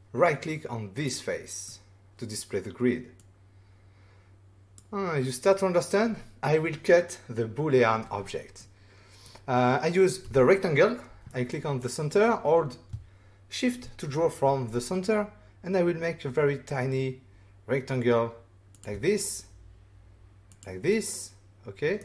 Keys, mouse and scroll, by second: 0.9 right click, 1.6 middle click, 3.1 click, 8.6 middle click, 10.2 r, 11.2 middle click, 11.8 click, 18.7 shift+click, 20.4 click, 20.9 middle click.